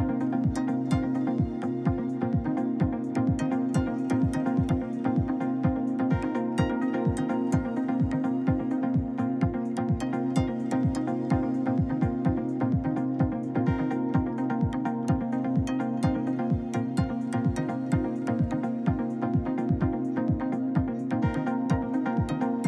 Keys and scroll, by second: 5.2 1, 5.8 Return, 7.4 1, 7.9 Return.